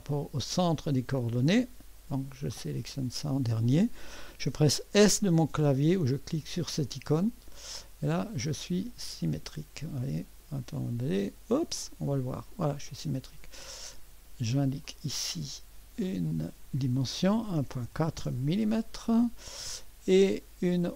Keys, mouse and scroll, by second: 2.3-5.5 drag, 6.9 s, 9.8 click, 11.8-13.5 drag, 14.8 click, 16.1 click, 17.1-18.4 typing, 20.1-20.6 scroll up 1, 20.3 middle click.